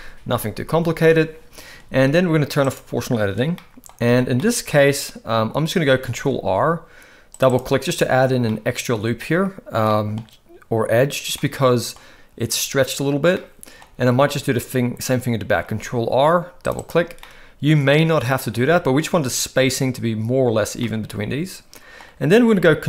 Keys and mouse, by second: 2.6 click, 3.6 middle click, 4.1 alt+a, 4.4 middle click, 6.1 ctrl+r, 8.5 middle click, 9.9 middle click, 11.4 middle click, 13.3 middle click, 15.7 ctrl+r, 17.2-18.4 middle drag, 18.6 a, 20.8-22.0 middle drag.